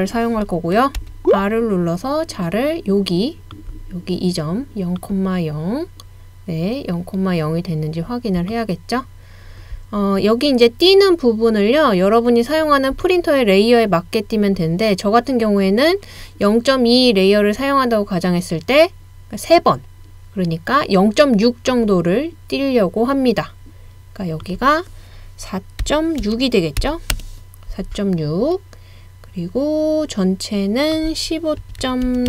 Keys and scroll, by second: 1.0 r, 25.8-27.3 typing, 28.7-29.4 typing, 31.6-32.2 typing.